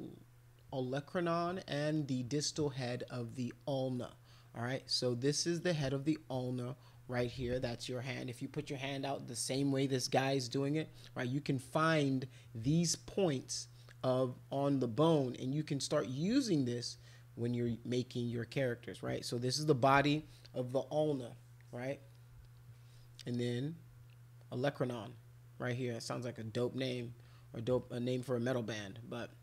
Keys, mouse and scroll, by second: 27.7 middle click, 28.5 middle click.